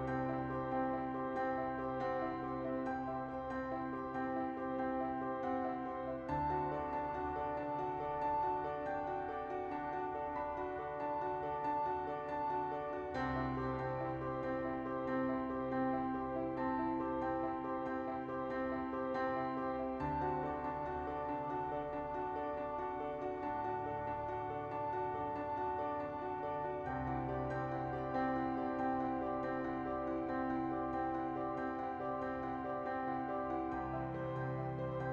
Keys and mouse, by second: 0.0 click, 2.6 s, 2.7 z, 3.6 Tab, 4.4 ctrl+2, 4.4 ctrl+z, 4.9 Tab, 5.4 ctrl+b, 9.5 Tab, 10.3 Tab, 10.8 ctrl+r, 13.2 ctrl+r, 14.3 Tab, 15.2 shift+middle click, 16.4 click, 16.6 Tab, 17.2 ctrl+z, 17.2 KP_1, 17.5 e, 18.9 e, 19.0 s, 19.7 right click, 19.9 middle click, 20.8 KP_1, 21.4 e, 21.5 z, 22.6 right click, 23.5 middle click, 24.8 click, 25.4 alt+shift+click, 25.8 ctrl+z, 26.1 alt+shift+right click, 26.6 right click, 27.0 KP_1, 27.6 ctrl+b, 29.1 Tab, 29.7 ctrl+z, 30.1 click, 31.0 Tab, 31.4 Tab, 31.9 ctrl+a, 32.1 Tab, 32.4 a, 33.3 Tab, 33.8 Tab, 34.2 Tab, 34.9 ctrl+a.